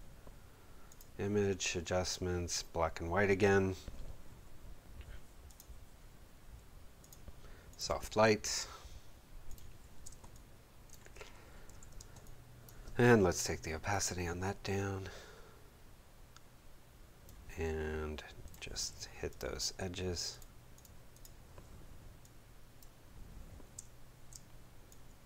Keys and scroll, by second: 10.0 space, 11.7 v, 12.2 space, 18.9 b, 23.7 space.